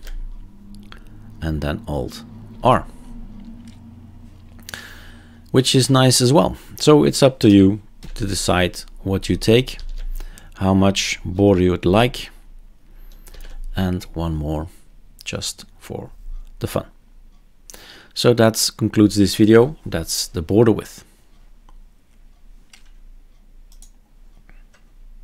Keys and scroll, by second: 2.5 alt+r, 7.4 BackSpace, 8.0 3, 9.7 ctrl+s, 13.3 alt+r.